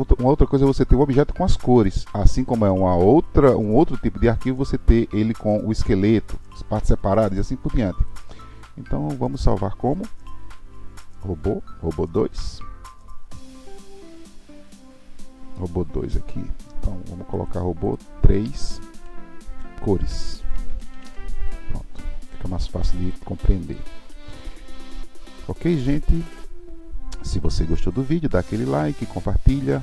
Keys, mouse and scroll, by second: 8.1-11.0 drag, 25.7-26.7 middle drag.